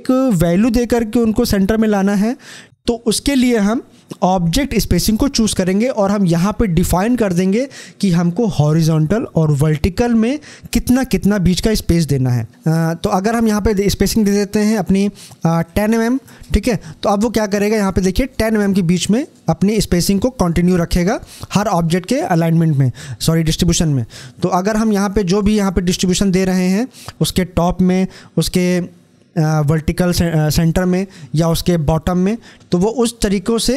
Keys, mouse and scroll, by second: 2.6 click, 12.6 click, 18.0 click, 25.1 click, 32.5 click.